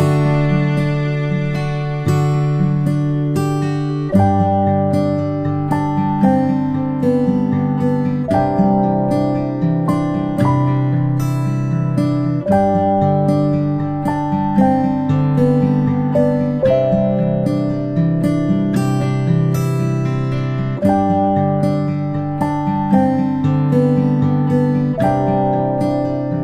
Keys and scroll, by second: 1.1-1.5 alt+space, 8.1 ctrl+alt+space, 8.6 ctrl+z, 8.8-9.3 space, 15.8-16.2 ctrl+alt+space, 17.1 ctrl+alt+space.